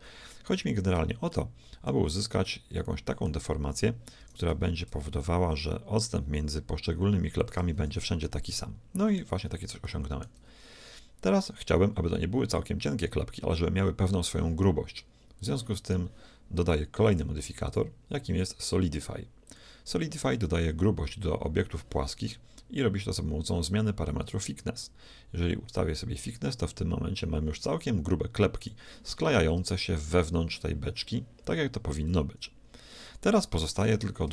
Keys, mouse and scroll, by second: 1.4-4.1 middle drag, 4.2 r, 8.1-11.7 middle drag, 15.9-17.7 right drag, 17.1-19.4 drag, 24.9-26.3 drag, 32.9-34.3 middle drag.